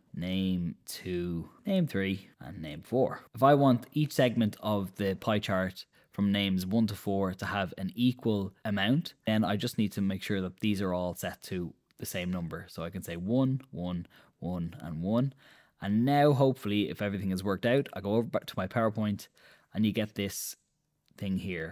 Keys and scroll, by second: 0.0-3.8 typing, 12.8 1, 13.8 1, 14.5 1, 15.1 1, 18.1 super+Tab.